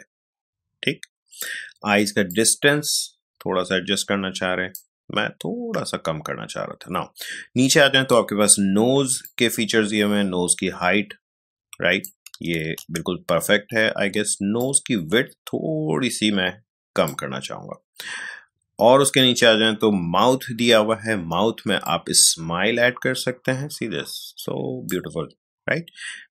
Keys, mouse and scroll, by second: 9.2-12.6 drag, 12.6 ctrl+z, 14.6-18.6 drag, 18.6-20.7 scroll down 1, 21.8-26.3 drag, 21.8-22.1 scroll down 1.